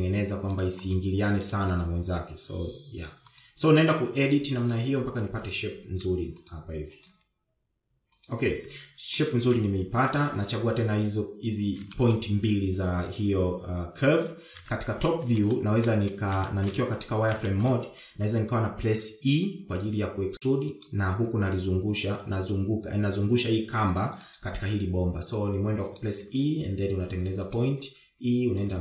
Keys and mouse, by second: 1.5 click, 1.5 g, 2.5 click, 2.5 g, 3.3 click, 3.6 g, 5.3 click, 5.4 g, 6.2 click, 6.4 g, 7.3 g, 8.7 g, 13.5 shift+middle click, 16.1 KP_7, 16.8 shift+z, 17.1 shift+middle click, 18.0 shift+middle click, 19.0 shift+middle click, 20.3 e, 22.8 e, 26.2 e, 27.9 e.